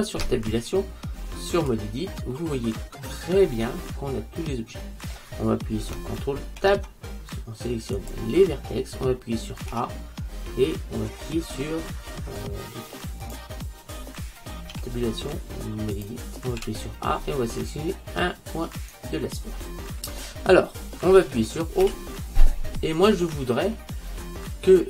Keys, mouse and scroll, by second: 0.3 Tab, 2.4-4.4 middle drag, 6.7 ctrl+Tab, 9.8 Tab, 14.8 Tab, 16.1 Tab, 16.7 a, 18.9-21.9 right drag, 21.9 o, 23.8-24.8 middle drag.